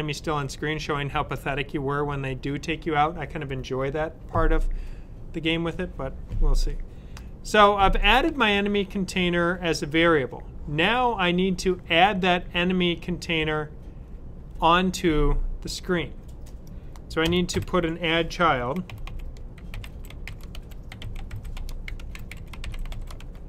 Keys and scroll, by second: 17.4 Up, 18.5 typing, 19.8-23.4 typing.